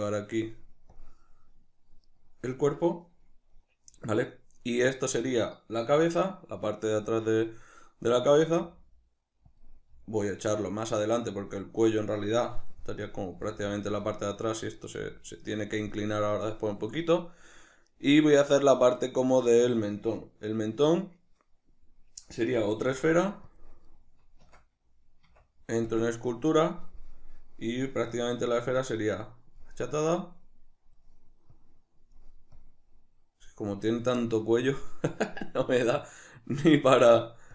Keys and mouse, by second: 0.4 drag, 2.1 right click, 9.7 click, 9.9 g, 11.5 click, 13.4 g, 13.8 click, 14.1 right click, 14.8 right click, 15.1 g, 15.8 click, 17.9 right click, 22.9 shift+d, 23.6 click, 24.5 Tab, 28.2-36.1 drag, 36.1-37.5 ctrl+middle drag.